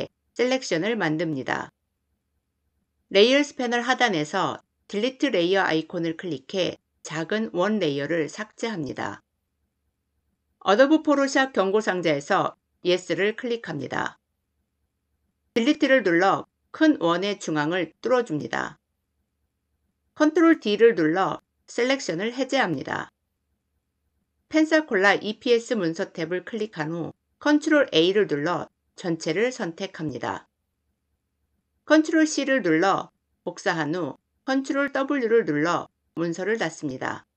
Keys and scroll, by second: 15.4 Delete, 20.1 ctrl+d, 27.3 ctrl+a, 31.8 ctrl+c, 34.5 ctrl+w.